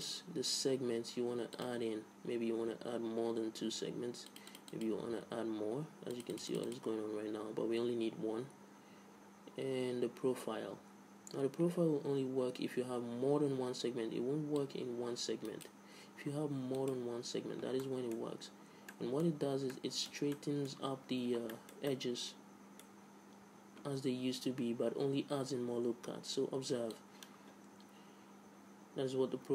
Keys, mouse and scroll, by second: 1.9-3.9 drag, 4.7-9.1 drag, 10.0-11.6 middle drag, 12.3 middle click, 15.0-17.0 drag, 17.3-19.1 drag, 19.1-24.2 middle drag, 27.4-29.2 drag.